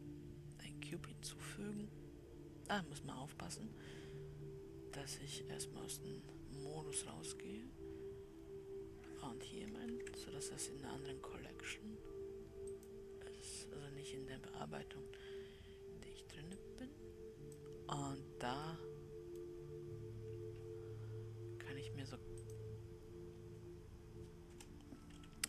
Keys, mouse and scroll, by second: 6.0 ctrl+z, 7.9 Tab, 10.2 shift+a, 17.0-19.0 drag, 19.0-22.9 middle drag, 22.9-25.4 drag.